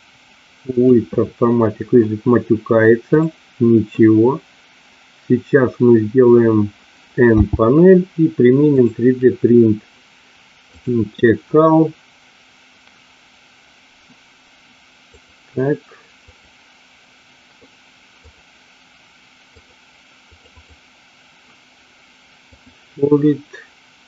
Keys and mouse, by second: 3.0 click, 7.3 n, 16.2 click, 18.2 click, 19.6 click, 20.2 click, 22.4 click.